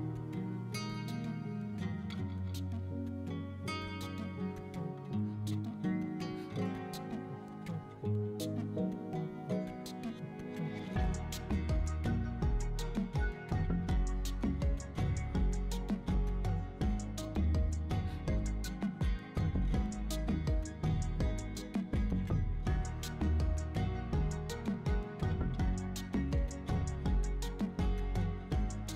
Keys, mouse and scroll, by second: 0.3 s, 0.3 z, 0.7 click, 0.9 middle click, 1.1 Tab, 1.2 middle click, 3.0-3.6 drag, 4.3 middle click, 4.6-5.8 drag, 6.5 click, 7.1 ctrl+z, 7.9 click, 8.6-10.7 drag, 11.7-12.3 scroll down 3, 12.1 click, 13.1-13.8 middle drag, 14.1 middle drag, 14.3 shift+middle click, 14.4-15.3 middle drag, 15.4 shift+middle click, 15.6 middle click, 16.2 middle click, 17.2-18.3 shift+drag, 18.9 click, 20.4-21.5 shift+drag, 21.6 shift+click, 22.2 middle click, 23.3 Tab, 23.3 a, 23.8 s, 23.8 shift+z, 25.0 click, 25.2 s, 25.3 z, 25.6 right click, 26.0 click, 26.3 click, 26.8 s, 27.2 z, 27.5 click, 28.1 Tab, 28.4 Tab, 28.4 middle drag, 28.7 middle click, 28.7 right click.